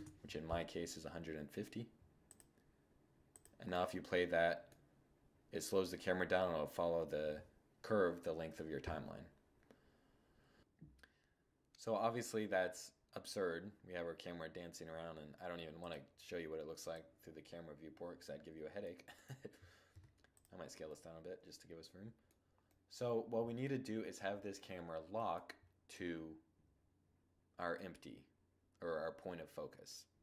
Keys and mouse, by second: 1.5-3.0 drag, 3.0-4.1 middle drag, 4.1-4.5 drag, 15.0-17.4 drag, 17.4-18.4 middle drag, 18.4-20.1 right drag, 19.2 s, 20.1-21.2 drag, 21.2 middle click, 21.3 click, 22.0 middle click, 25.2-26.9 drag, 29.9-30.2 drag.